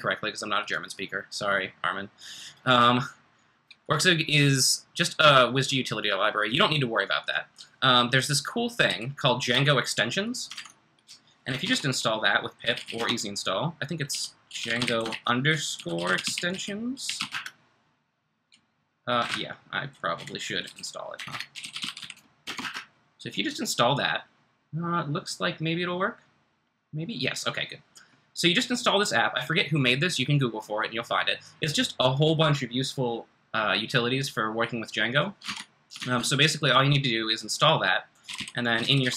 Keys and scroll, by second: 1.3 typing, 8.8 typing, 9.5 Escape, 10.5 super+Tab, 10.5 typing, 11.6 ctrl+c, 12.4-17.7 typing, 19.0 typing, 19.2 Up, 19.2 Left, 19.5 Left, 19.6 Left, 19.8 Left, 19.9 Left, 20.4-22.6 typing, 35.4 super+Tab, 36.1 super+Tab, 36.2 super+Tab, 38.0-39.1 typing.